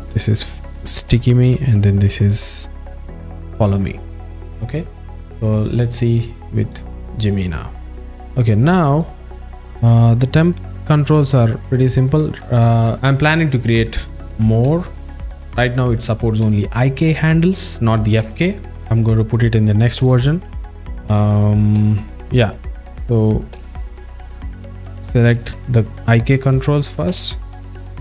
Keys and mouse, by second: 7.2 click, 8.1 ctrl+alt+Tab, 8.1-8.5 alt+middle drag, 8.9 click, 9.5-12.4 drag, 15.1 click, 21.5-22.0 alt+middle drag, 26.0 shift+drag, 27.1 a, 27.6 click.